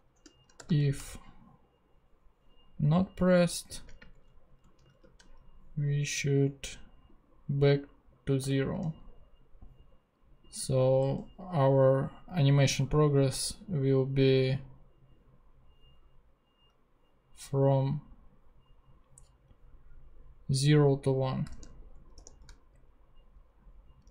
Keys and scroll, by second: 0.2 shift+BackSpace, 0.5 shift+;, 0.6 shift+space, 3.6 Left, 3.8 space, 4.1 Right, 4.8 super+Right, 4.9 super+v, 8.4 0, 10.9 BackSpace, 22.1 shift+super+p.